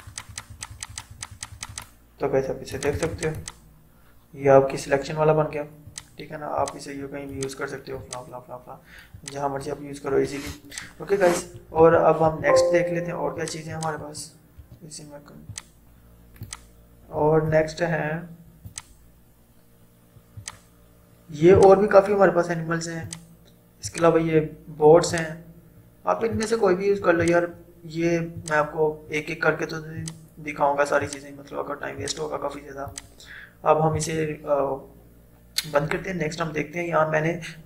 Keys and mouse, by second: 1.7 click, 5.9-10.7 drag, 11.8 ctrl+z, 13.4 click, 14.7 ctrl+d, 15.5-32.9 drag.